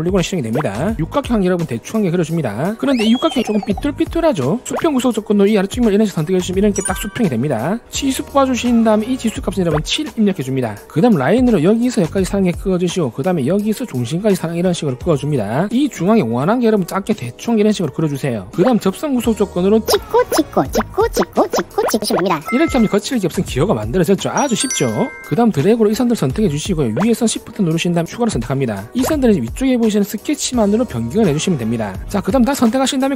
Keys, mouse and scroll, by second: 1.2 click, 2.5 click, 3.6 click, 5.6 click, 8.3 click, 9.2 click, 9.7 click, 12.0 click, 13.2 click, 14.2 click, 15.3 click, 16.7 2, 17.1 click, 18.0 click, 19.4 click, 25.4 shift+click, 26.1 shift+click, 27.3 shift+click, 29.0 click, 32.9 click.